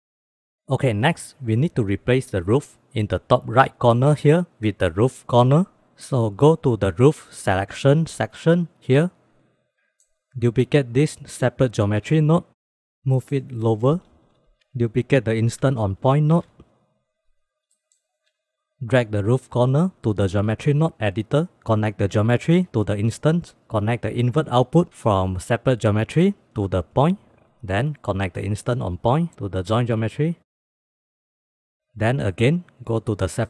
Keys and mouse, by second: 0.3 click, 6.5 click, 7.9 click, 8.7-9.4 drag, 9.9-10.3 drag, 11.1 shift+d, 12.6 drag, 12.8 KP_Add, 13.1 click, 13.3 f, 13.4 g, 15.5 shift+d, 16.7 click, 16.9 click, 17.2 g, 17.8 click, 18.1 click, 18.5 click, 20.1-21.0 drag, 22.0-23.4 drag, 24.2-27.3 drag, 27.6-28.0 middle drag, 28.3 middle drag, 28.5-30.0 drag, 30.2 middle click, 30.6 click, 30.8 click, 31.1 click, 32.6 click.